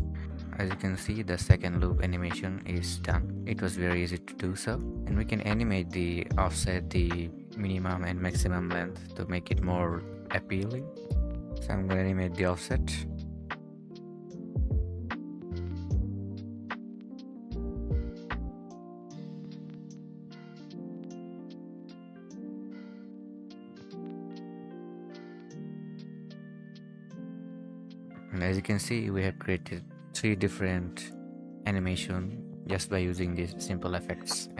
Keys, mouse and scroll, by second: 0.1 0, 11.3 Escape, 13.2-14.9 scroll down 1.